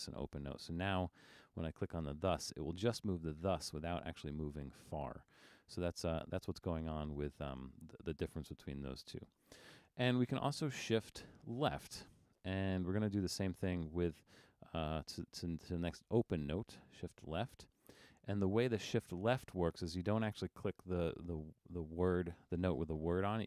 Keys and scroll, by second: 5.9 super+z.